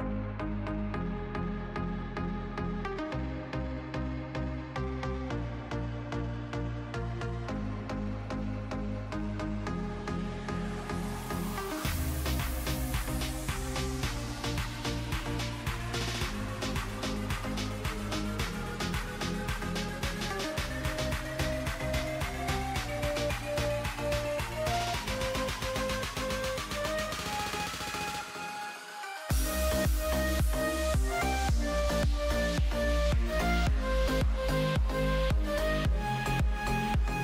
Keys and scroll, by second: 2.7 space, 6.4 space, 8.1 space, 9.7 ctrl+z, 11.5 space, 12.8 space, 14.3 space, 15.8 space, 17.7 space, 19.6 ctrl+z.